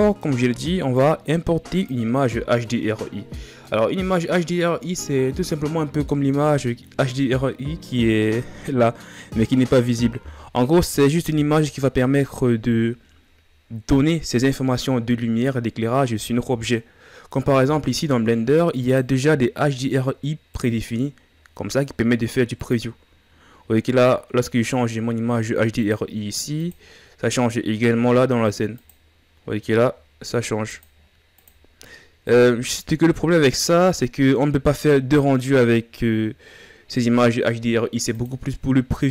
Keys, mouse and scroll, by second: 0.6-2.9 drag, 2.9-3.4 scroll down 3, 3.4-8.7 middle drag, 8.8-10.9 middle drag, 10.9 KP_1, 18.5-22.5 drag, 23.5-25.5 scroll up 2, 25.5-39.1 drag.